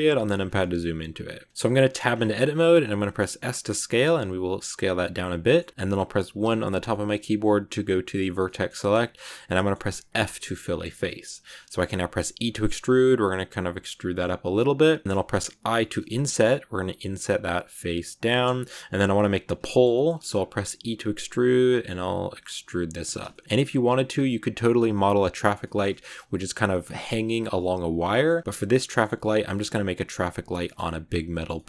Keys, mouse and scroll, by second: 0.2 scroll down 5, 0.5-1.8 middle drag, 1.8 Tab, 2.0-2.6 scroll up 4, 3.0 s, 5.3 middle click, 5.7-6.3 scroll up 3, 6.3 1, 6.8-10.0 middle drag, 10.0 f, 10.4 scroll down 1, 10.5 middle click, 11.4-12.1 scroll up 1, 12.1 e, 15.0-15.4 scroll up 3, 15.5 i, 18.5 scroll down 3, 19.3 scroll down 8, 19.6 shift+middle click, 20.0 scroll up 1, 20.2 scroll down 1, 20.6 e, 23.2-25.8 shift+middle drag, 25.8-28.0 scroll down 1, 28.0 middle click, 28.3 scroll up 2, 28.4-31.6 shift+middle drag.